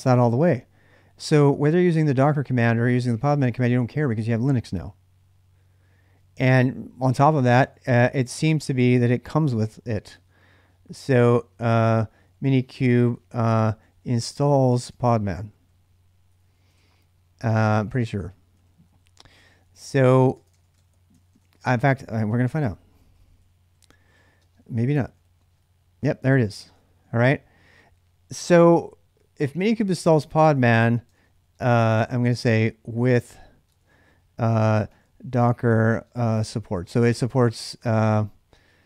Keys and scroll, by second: 7.7 j, 9.4-21.3 typing, 21.4 Return, 21.6 ctrl+a, 21.8 ctrl+a, 22.4-25.5 typing, 26.7 ctrl+a, 26.9 ctrl+a, 30.2-38.8 typing.